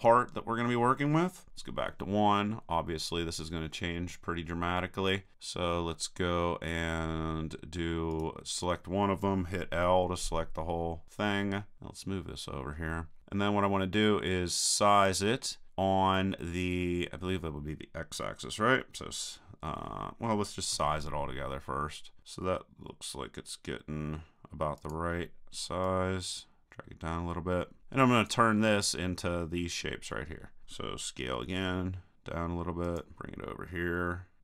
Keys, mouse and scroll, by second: 1.5 KP_1, 8.1-9.7 drag, 9.7 l, 20.7 s, 24.9-27.8 drag, 31.3 s, 32.9-34.4 drag.